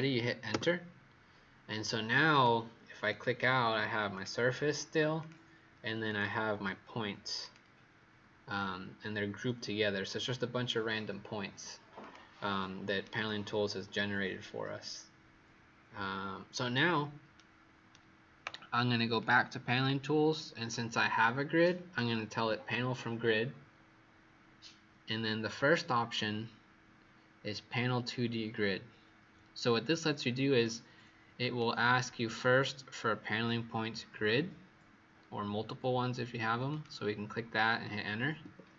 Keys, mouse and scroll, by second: 0.5 Return, 2.3 click, 12.9 right click, 19.1 click, 38.3 Return.